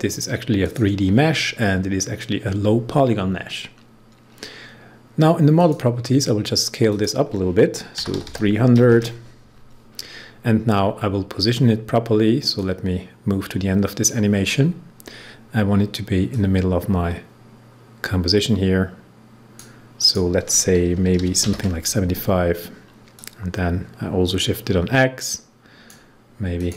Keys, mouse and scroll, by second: 0.5 click, 5.5 click, 7.7-8.7 typing, 12.5-19.9 drag, 20.9-21.8 typing, 23.1-26.5 drag.